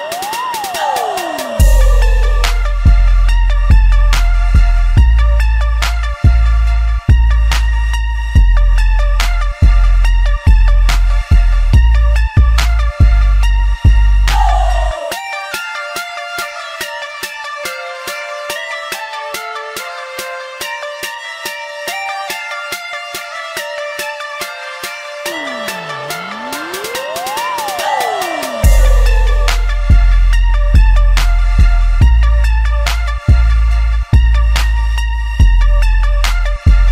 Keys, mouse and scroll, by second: 1.2 middle click, 1.9 click, 2.5 shift+click, 2.9 middle click, 3.8 shift+click, 4.2-5.7 middle drag, 5.7 shift+click, 6.2 shift+click, 7.0 ctrl+z, 7.5 shift+click, 8.2 middle click, 8.9 x, 9.7 middle click, 10.3 typing, 10.8 click, 11.1-12.2 middle drag, 12.2 ctrl+b, 15.0-16.8 shift+middle drag, 16.8 typing, 16.9 click, 17.8 click, 18.1 click, 18.8 shift+click, 19.1-20.5 middle drag, 20.5 e, 23.1 middle click, 23.5 s, 24.9 shift+middle click, 25.4 2, 25.8 click, 26.4 shift+click, 27.2 shift+click, 28.2 shift+click, 28.8 z, 29.4-30.7 middle drag, 30.7 z, 31.1-32.8 shift+middle drag, 32.8 ctrl+b.